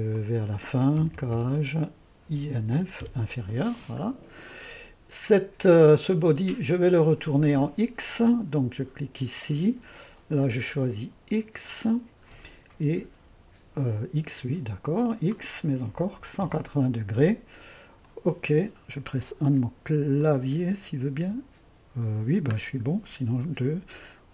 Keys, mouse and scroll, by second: 0.2 click, 1.1-3.3 typing, 4.3-5.3 scroll down 1, 7.7-10.3 drag, 10.5-12.9 drag, 12.7-13.4 typing, 14.9 click, 15.4 click, 16.0 KP_1, 16.2 KP_8, 16.5 KP_0, 18.1-19.2 drag, 19.2 KP_1, 20.2-21.3 drag, 21.3 1, 23.4 3.